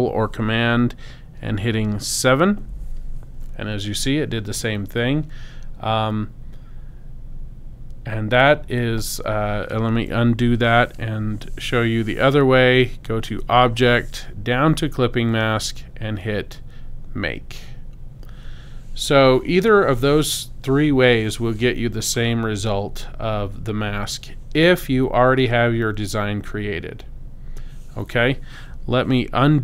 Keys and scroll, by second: 2.2 super+7, 10.3 super+z.